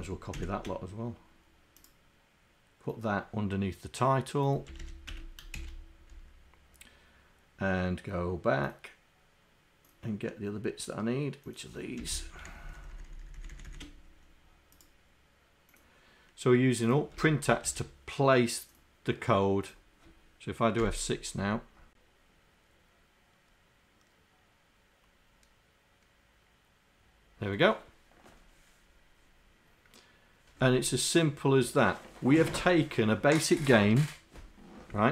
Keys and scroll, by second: 0.0 shift+Down, 0.4 shift+Down, 4.8 Home, 12.1 Home, 12.8 shift+Down, 13.0 shift+Down, 13.7 shift+Down, 17.2 Return.